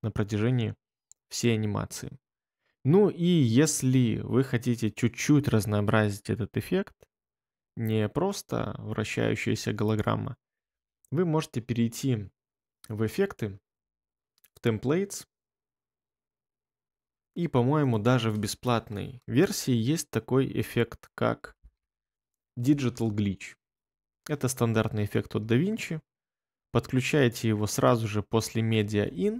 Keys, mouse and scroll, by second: 21.1-22.2 typing.